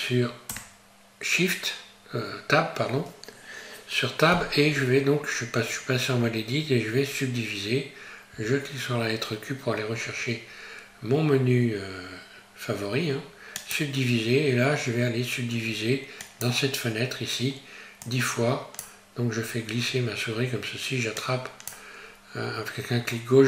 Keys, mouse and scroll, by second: 0.5 Tab, 16.2 click, 21.2 click.